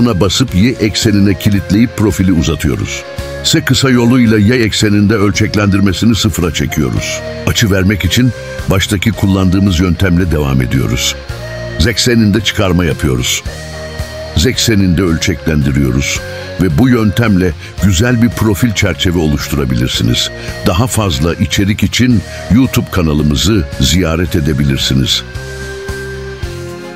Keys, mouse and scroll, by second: 1.3 y, 2.2 click, 3.4 s, 4.1 y, 4.7 0, 5.1 Return, 6.2-6.8 scroll down 1, 9.4 ctrl+alt+shift+s, 10.7 1, 11.3 Return, 11.7 e, 12.0 z, 14.4 click, 14.9 s, 15.3 z, 16.1 0, 16.5 Return, 18.1 Tab, 18.4-18.8 scroll down 2, 18.5 click, 18.8 middle click, 19.1 middle click, 20.3 scroll up 1, 20.4 middle click, 21.2 scroll down 1, 21.3 middle click, 21.8 scroll up 2, 21.9 middle click, 23.1 right click, 23.2 click, 23.4 right click, 23.6 click, 23.8 middle click, 24.2 scroll down 1, 24.6 middle click, 26.6 middle click.